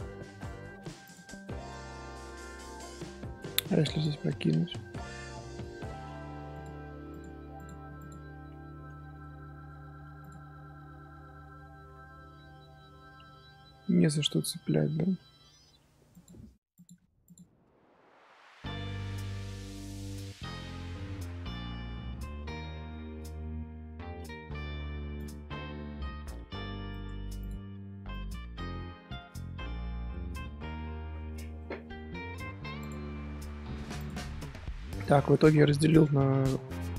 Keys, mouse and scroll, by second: 1.0 click, 1.6 scroll up 1, 1.9 middle click, 2.7 scroll up 1, 2.8 scroll down 1, 3.0 scroll up 1, 3.1 middle click, 3.9 shift+click, 5.6 j, 6.5 click, 7.5 click, 8.3 scroll down 2, 8.8 Tab, 9.1 middle click, 9.4 scroll up 1, 9.4 scroll down 1, 9.9 1, 10.2 click, 10.5-13.2 middle drag, 13.2 ctrl+z, 13.4-15.1 ctrl+z, 15.8 1, 16.1 click, 16.7 click, 17.8 scroll down 1, 17.8 scroll up 1, 18.0 1, 18.2-19.0 middle drag, 19.0-19.9 scroll up 1, 19.9-20.3 scroll up 1, 20.3 Tab, 20.5-21.5 middle drag, 21.5 Tab, 22.4 middle click, 23.0 z, 23.3 middle click, 24.2 a, 24.4 middle click, 25.1 click, 27.4 click, 28.7-29.8 middle drag, 29.8 z, 30.1-30.5 middle drag, 30.5 z, 31.5-34.1 middle drag, 34.4 middle click, 34.7 scroll up 2, 35.0 click, 35.3 scroll up 1, 35.4-36.9 middle drag.